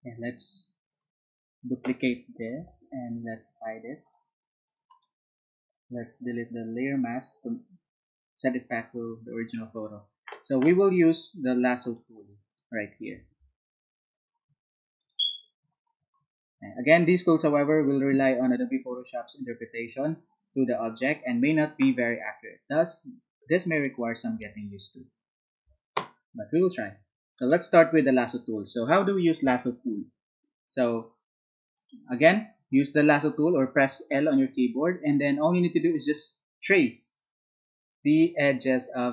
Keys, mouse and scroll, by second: 0.0 alt+click, 0.9 alt+click, 4.0 ctrl+click, 4.6 ctrl+click, 4.9 ctrl+right click, 6.2 ctrl+click, 11.8 ctrl+right click, 12.5 ctrl+click, 13.2 alt+Tab, 15.0 click, 24.5 alt+Tab, 27.4 alt+right click, 31.8 ctrl+right click, 36.7-39.1 ctrl+drag.